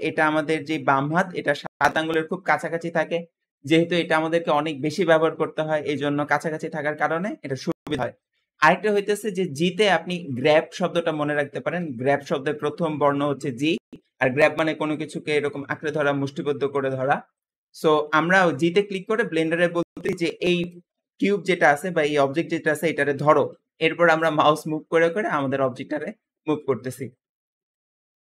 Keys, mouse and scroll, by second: 24.2 g.